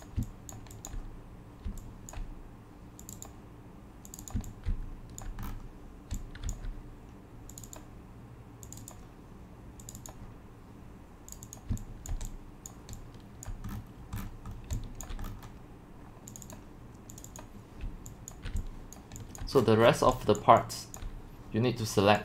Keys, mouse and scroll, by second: 0.0 drag, 0.5 click, 0.9 click, 0.9-1.7 typing, 2.1-4.4 drag, 4.1-5.7 typing, 5.5 middle click, 5.9 scroll, 6.6 click, 7.8 click, 8.7-9.9 drag, 11.4 click, 11.6 click, 11.7 x, 12.1 click, 12.1 c, 12.7 c, 12.7 click, 12.8-13.5 c, 13.5 drag, 13.7 scroll down 3, 13.8 middle click, 13.8 scroll, 13.9 scroll down 1, 14.1 scroll down 1, 14.2 scroll, 14.2 scroll down 1, 14.2 scroll down 1, 14.3 scroll down 1, 14.5 scroll down 1, 14.6 scroll, 15.0 click, 15.2 middle click, 15.2 scroll down 1, 15.2 scroll down 1, 15.3 scroll, 15.3-16.4 scroll down 6, 16.4-17.5 drag, 17.9-21.1 typing, 18.3 click, 19.0 click, 19.6 middle click, 19.8 scroll, 20.4 click, 21.0 click.